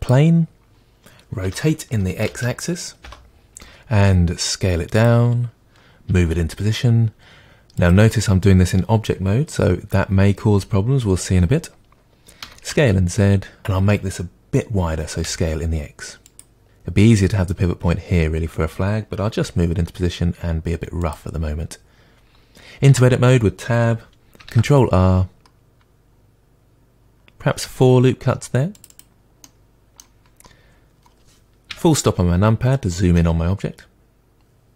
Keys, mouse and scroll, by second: 1.4 r, 3.1 Return, 3.6 s, 5.0 click, 6.1 g, 7.9 click, 12.4 s, 15.0 s, 16.4 click, 19.3 g, 21.1 click, 22.9 Tab, 24.5 ctrl+r, 28.9 click, 29.4-30.3 middle drag, 30.3-30.7 scroll up 2, 31.7 KP_Decimal, 32.7-33.1 scroll down 2, 33.1-34.7 middle drag.